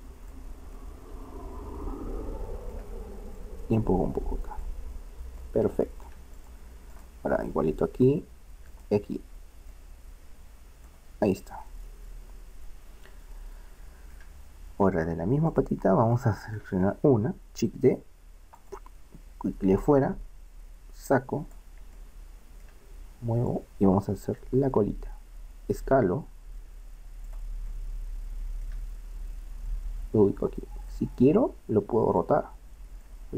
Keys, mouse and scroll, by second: 0.8 middle click, 6.9 right click, 8.3-9.7 right drag, 10.8 click, 11.5-13.2 middle drag, 14.9 click, 15.4 right click, 16.2-17.3 middle drag, 17.3 click, 17.8 shift+d, 19.8-21.4 drag, 22.0-23.5 middle drag, 23.5-25.5 drag, 25.5 s, 27.8-29.2 middle drag, 29.8-31.5 drag, 32.2-33.3 drag.